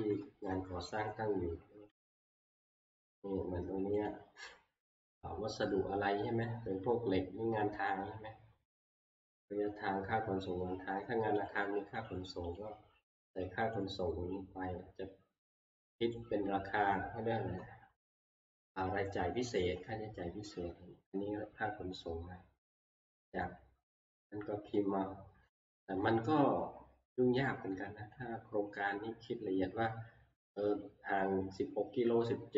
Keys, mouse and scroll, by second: 1.0 click, 2.1 ctrl+Home, 4.1 click, 8.1 click, 11.5 click, 12.1 click, 12.6 click, 13.8 click, 16.2 click, 20.3 Right, 20.3 click, 20.7 Right, 22.0 scroll down 1, 22.4-22.9 scroll.